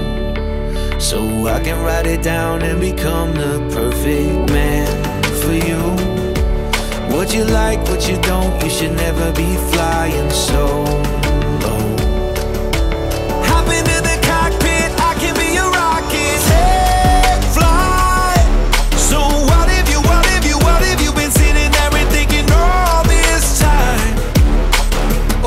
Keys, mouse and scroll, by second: 11.0-25.4 drag.